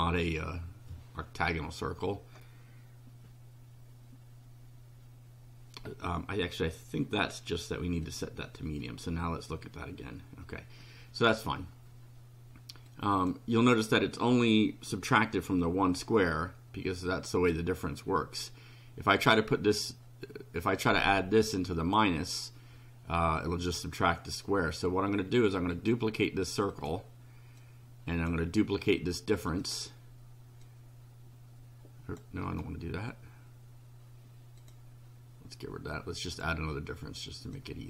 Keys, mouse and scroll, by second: 7.2 click, 8.0 click, 12.9 click, 19.2-22.1 drag, 25.8 right click, 26.8 click, 27.6-28.5 drag, 28.7 right click, 29.6 click, 30.6-32.3 drag, 32.5 right click, 34.6 click, 36.3 click, 37.6 click.